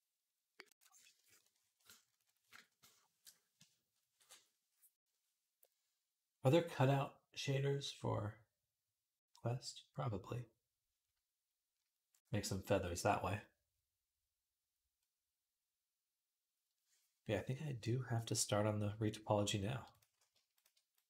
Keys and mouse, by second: 18.1-19.7 middle drag, 19.7 click, 19.8 middle click, 20.3 shift+click, 20.4 shift+middle click, 20.7 click.